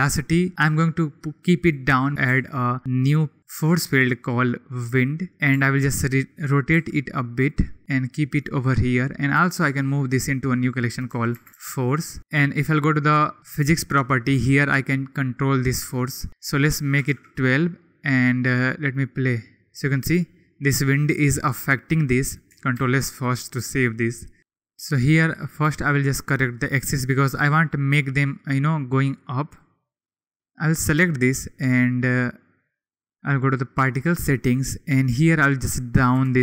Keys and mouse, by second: 0.3-1.6 drag, 2.2 shift+a, 5.5 r, 6.7 g, 9.3 m, 13.4 click, 16.7 click, 19.0 click, 22.8 ctrl+s, 25.6 r, 29.0 click, 30.3-32.8 drag, 35.3-36.4 drag.